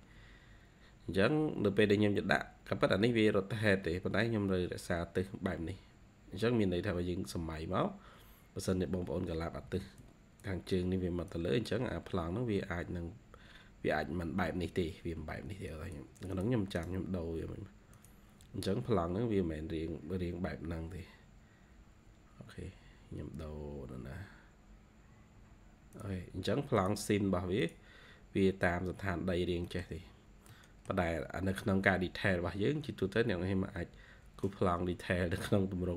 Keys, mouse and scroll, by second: 1.1-1.6 scroll down 4, 3.7 scroll down 5, 4.3-5.1 scroll up 7, 6.9-8.5 scroll down 9, 9.6 ctrl+q, 16.1 double click, 16.2 double click, 16.7 right click, 19.1-20.0 scroll down 7, 20.0-20.7 scroll down 7, 22.4-23.6 scroll up 7, 24.2-25.5 scroll up 12, 29.3 scroll down 1, 29.6 middle click, 30.0 scroll down 1, 30.4 middle click, 31.0 scroll down 1, 31.4-32.5 scroll up 5, 33.1 scroll down 1, 34.0-34.8 scroll down 2.